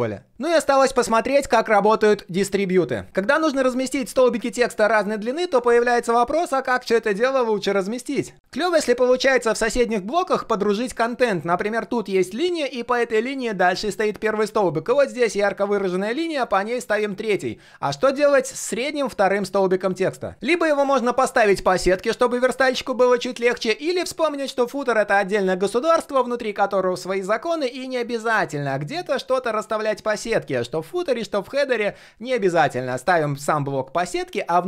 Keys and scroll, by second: 21.1 ctrl+shift+4.